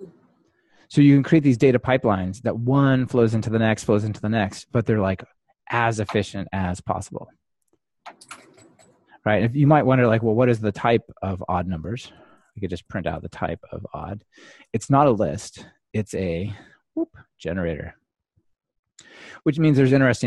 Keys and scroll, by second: 14.7 Return, 15.4 ctrl+r.